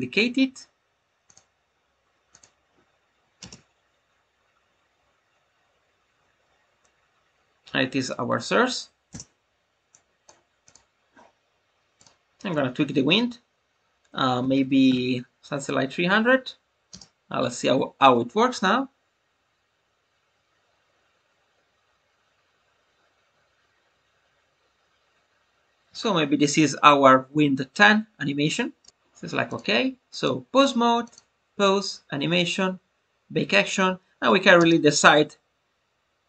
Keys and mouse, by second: 1.2 click, 2.3-3.8 drag, 3.8 space, 9.0 space, 9.8 click, 10.6 click, 12.0-15.5 drag, 28.7 space, 29.5-30.2 drag, 31.0-33.6 drag, 35.0 space.